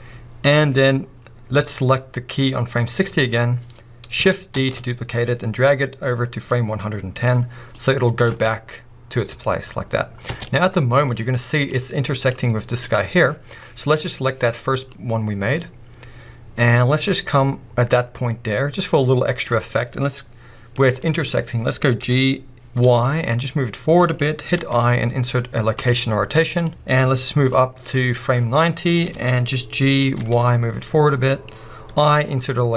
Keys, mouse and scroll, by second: 1.7-7.2 drag, 4.5 shift+d, 8.3-10.4 drag, 8.3 space, 10.4 middle click, 11.0 scroll up 1, 11.7-20.7 drag, 20.7 middle click, 21.1-22.1 scroll up 1, 22.1 g, 24.1 click, 24.6 i, 26.7-29.0 drag, 29.0-31.5 middle drag, 29.0 g, 31.5 click.